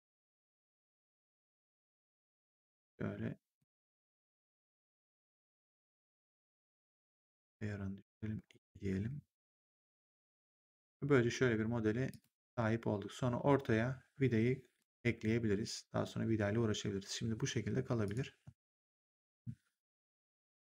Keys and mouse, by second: 1.8 click, 3.5 click, 5.4 click, 9.0 3, 9.5 right click, 10.3 click, 12.0 click, 14.7 click, 17.9 click, 18.5 ctrl+1, 20.4 click.